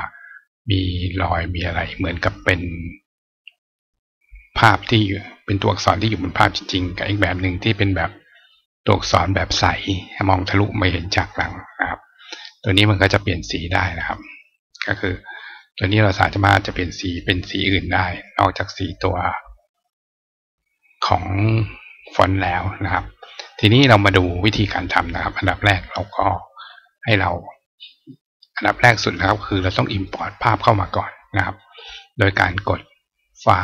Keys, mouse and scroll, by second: 0.1 click, 1.6 right click, 4.5 right click, 6.6 click, 12.2-13.1 scroll down 1, 13.1-13.8 scroll down 1, 13.8 scroll up 2, 14.8 click, 15.7 click, 16.8 click, 17.4 click, 18.0 click, 18.5 click, 22.7 click, 28.9 click, 29.2 right click, 29.9 right click, 31.1 click, 33.1 click.